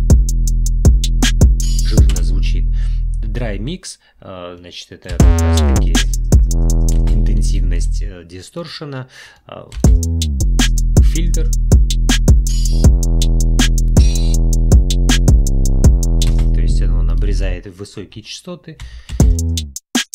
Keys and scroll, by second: 2.2 space, 5.1 space, 7.0 space, 9.7 space, 16.3 space, 19.1 space.